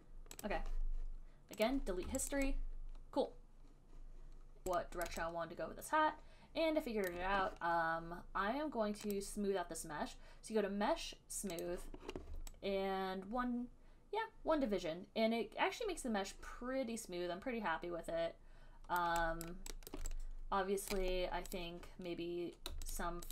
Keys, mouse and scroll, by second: 0.2 right click, 0.7 click, 2.1 click, 2.5 alt+right click, 4.8 alt+click, 5.3 alt+right click, 7.3 alt+click, 9.4 click, 11.9 click, 19.2 alt+click, 19.7 alt+click, 20.2 alt+click, 21.2 right click, 21.9 right click, 23.2 shift+click.